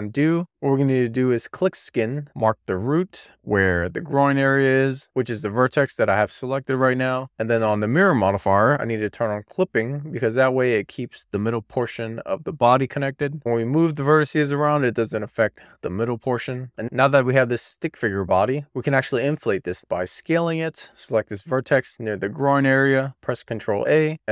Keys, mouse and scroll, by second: 0.6 click, 5.4 click, 7.1 click, 9.1 click, 10.6-12.2 scroll down 1, 12.2-12.6 scroll up 1, 13.6 click, 15.0 super+z, 15.6 alt+z, 16.3 scroll down 1, 16.6 shift+middle click, 17.2-17.6 scroll up 1, 17.6-18.5 scroll down 1, 18.5-19.1 scroll down 1, 19.1-20.7 scroll up 1, 20.7 click, 22.5 alt+z, 23.3 ctrl+a.